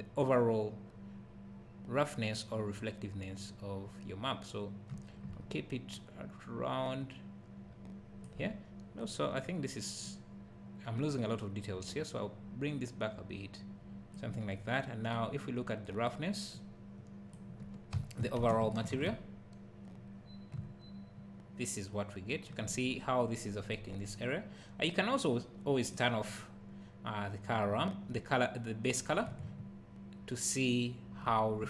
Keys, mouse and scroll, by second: 20.6 `, 26.1-31.6 drag.